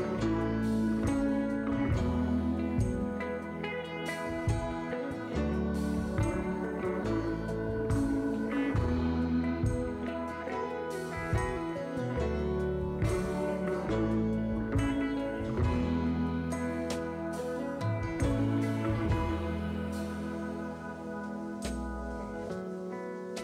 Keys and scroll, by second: 10.0 s, 11.9-12.7 typing, 13.6 ctrl+z, 14.3 s, 20.2 2.